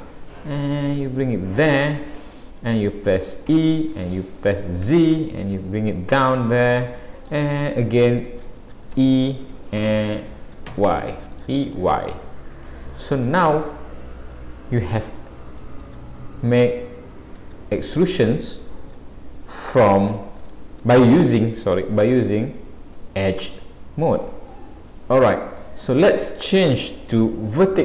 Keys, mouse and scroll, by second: 2.0 middle click, 3.5 e, 6.5 middle click, 9.0 e, 12.9 scroll down 3, 13.4 middle click, 15.3-15.9 scroll up 2, 15.9 middle click, 19.8-20.4 scroll up 2, 24.5 middle click, 26.9 click.